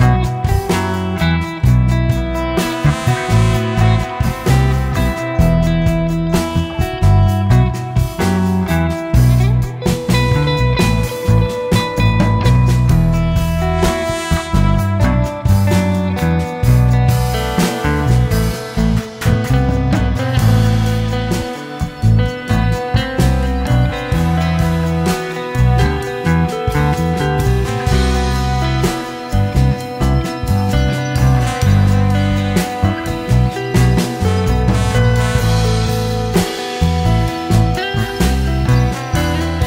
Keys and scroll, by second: 20.3 Delete.